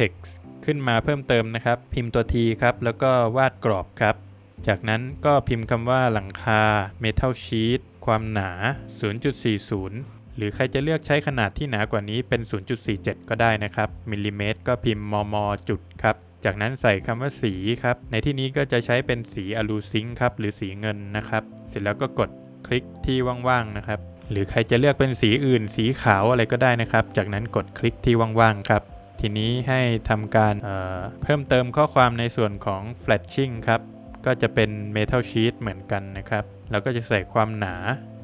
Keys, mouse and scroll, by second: 2.4 BackSpace, 3.8 scroll up 2, 6.0 space, 6.7 shift+m, 7.7 space, 8.8 space, 9.4 space, 11.0 BackSpace, 11.1 BackSpace, 13.0 space, 14.6 BackSpace, 16.2 space, 17.4 shift+a, 21.0 BackSpace, 23.5 click, 25.3 click, 26.4 Escape, 26.8 click, 27.1 double click, 28.8 space, 29.2 Escape, 29.6 click, 29.8 double click, 30.5 click, 31.7 space, 32.4 shift+m, 33.6 space, 34.0 shift+s, 36.5 space, 38.0 space.